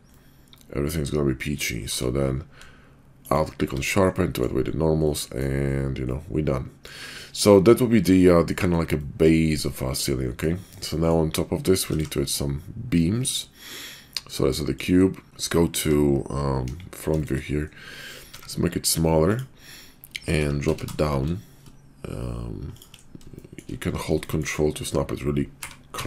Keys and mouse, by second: 0.1-1.6 middle drag, 1.8 q, 4.1-4.5 drag, 5.0-5.5 middle drag, 6.1-6.9 middle drag, 8.2-8.5 middle drag, 8.9-10.4 middle drag, 10.9 middle drag, 11.8 shift+a, 15.3 `, 15.8 `, 16.6 KP_5, 17.2 shift+middle click, 18.2 s, 20.4 g, 23.4 shift+middle click, 24.2 shift+middle click, 25.5 g.